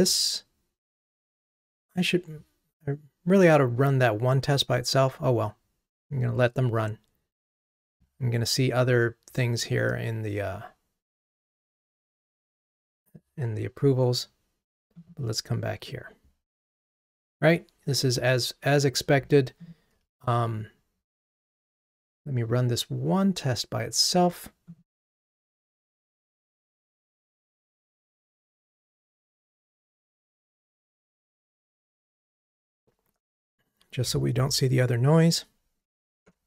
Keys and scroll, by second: 36.3 ctrl+Tab.